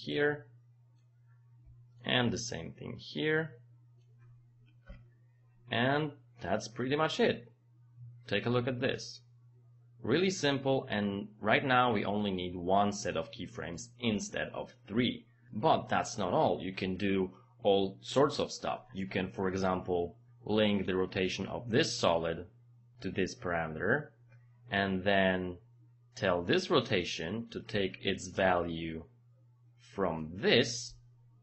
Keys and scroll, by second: 4.9 Return.